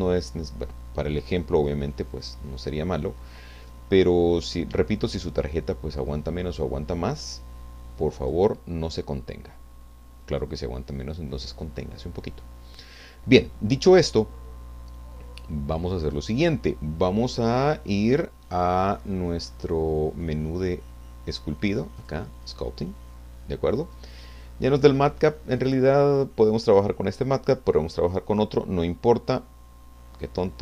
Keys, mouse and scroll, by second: 1.9-4.2 middle drag, 6.9-8.5 drag, 10.7-13.0 drag, 14.9-16.3 drag, 24.4-24.8 scroll up 1, 30.2 click.